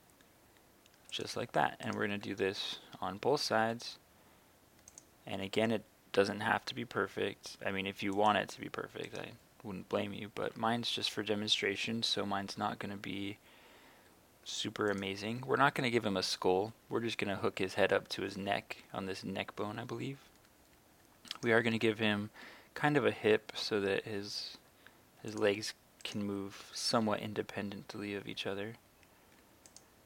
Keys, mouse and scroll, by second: 1.1 click, 1.9 right click, 2.3 e, 3.6 x, 4.9-5.9 drag, 5.4 e, 6.1 z, 8.2 click, 9.1 right click, 10.4 e, 12.3 z, 15.0 click, 21.4 right click, 21.8 e, 23.2 x, 25.3 click, 26.0 right click, 26.5 e, 26.9 x, 29.7 click.